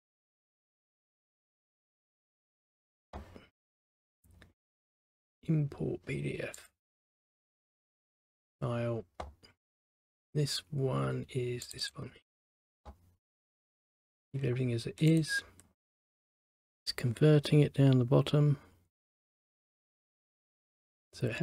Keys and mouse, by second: 2.2 click, 4.2 click, 6.7 click, 7.8 right click, 8.6 click, 11.8 click, 11.9 click, 15.2 click.